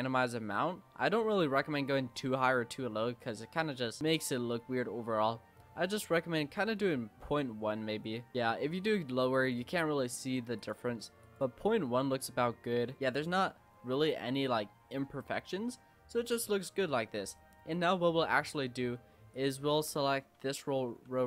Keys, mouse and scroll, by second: 10.6 click, 11.8-13.0 scroll up 4, 13.0-14.1 middle drag, 14.1 scroll up 1, 14.6-15.1 middle drag, 15.1-15.7 scroll down 5, 15.7 Tab, 16.0 Tab, 16.3 click, 16.6 scroll down 2, 16.9-17.9 middle drag, 17.9 Tab, 18.4-19.3 scroll up 3, 19.3 click, 19.9-21.2 typing.